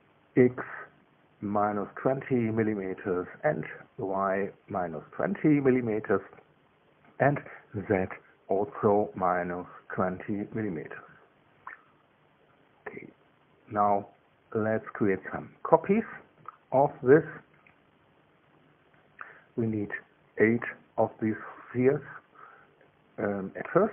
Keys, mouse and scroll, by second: 1.7 click, 2.7 KP_Subtract, 3.2 KP_2, 3.3 KP_0, 4.0 KP_Enter, 5.5 click, 6.9 KP_Subtract, 7.3 KP_2, 7.5 KP_0, 8.0 KP_Enter, 9.8 click, 10.7 KP_Subtract, 11.0 KP_2, 11.3 KP_0, 11.7 KP_Enter, 12.8-15.6 drag, 16.3 KP_2, 18.3 KP_1, 18.7 KP_3, 19.5 KP_2.